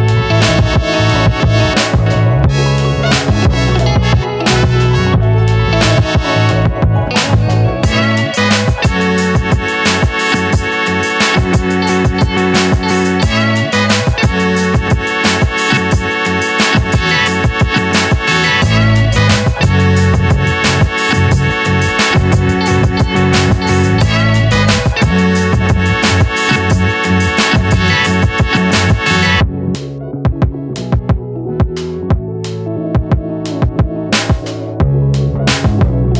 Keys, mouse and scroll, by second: 0.6 r, 2.2 `, 5.5 `, 7.3 click, 9.6 ctrl+r, 9.6 Tab, 11.8 ctrl+r, 17.4 right click, 19.9 right click, 19.9-24.2 drag, 25.6-28.4 drag, 30.1 Return, 34.0 Return, 34.2 click.